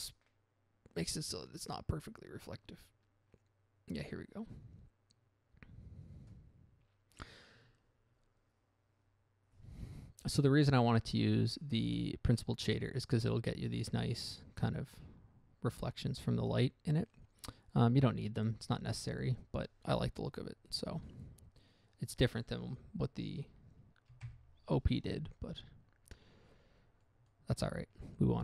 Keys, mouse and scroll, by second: 21.2 Escape, 24.6 ctrl+Left, 26.0-26.4 scroll down 1, 27.4 middle click, 27.6 middle click.